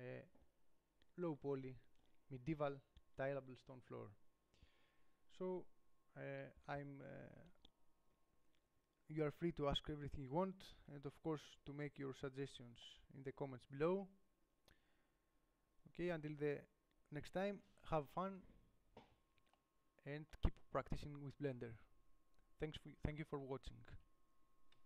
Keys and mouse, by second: 5.9-12.2 middle drag, 18.4-20.0 middle drag.